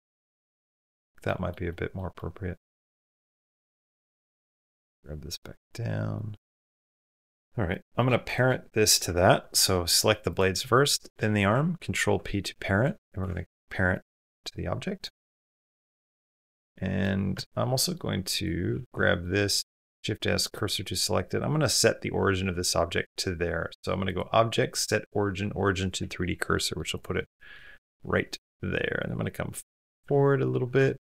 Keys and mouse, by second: 1.0 middle click, 1.5 middle click, 1.9 middle click, 2.5 middle click, 3.4 middle click, 4.1 shift+drag, 4.5 g, 7.5 click, 8.1 shift+click, 11.8 ctrl+p, 15.1 drag, 16.0 shift+drag, 16.5-16.8 drag, 17.1 Tab, 17.6 middle click, 18.5 3, 19.0 middle click, 19.6 shift+s, 22.3 Tab, 26.3 click, 26.9 click, 27.5 g, 29.3 middle click, 29.9 z, 30.8-31.1 middle drag.